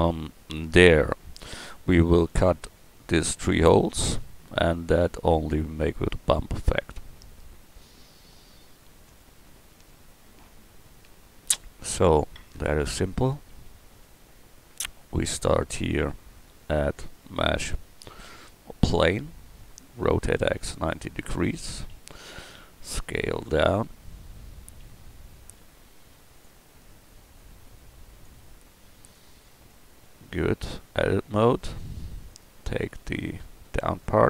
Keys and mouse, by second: 15.5-17.1 drag, 20.0 r, 21.9 s, 24.7 s, 28.6 s, 30.7 Tab, 31.5 Tab, 32.3-34.2 right drag.